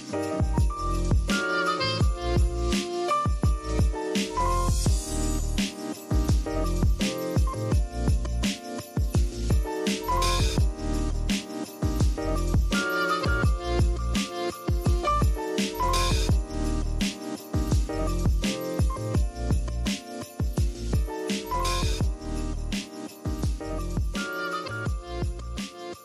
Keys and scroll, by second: 1.6-2.4 typing, 5.8 super+z, 10.7 z, 11.1 v, 14.1-15.5 typing, 16.7-20.1 typing, 21.7 super+j.